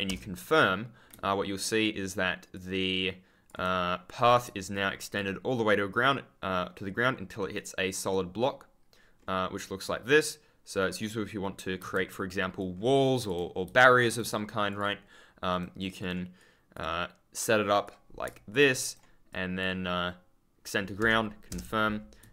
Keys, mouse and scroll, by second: 0.0 Return, 2.5 ctrl+click, 2.6-3.0 scroll up 1, 4.7 ctrl+click, 4.7-5.4 scroll up 1, 5.8 ctrl+click, 7.5 ctrl+click, 8.3-9.6 ctrl+scroll down 1, 11.7 ctrl+z, 12.7-13.4 ctrl+scroll up 1, 13.6 d, 14.1 click, 15.4 right click, 16.3 click, 18.2 ctrl+click, 18.8 right click, 19.2 click, 21.4 Return.